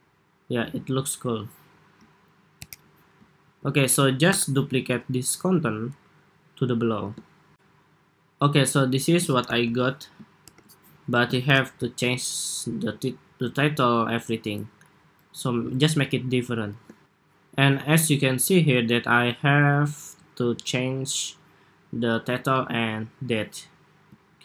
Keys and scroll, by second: 2.4 super+=, 3.3 super+s, 4.1 super+-, 9.1 super+=, 10.3 super+-, 11.2 super+=, 14.4 ↻, 16.7 shift+super+2, 24.0 super+s.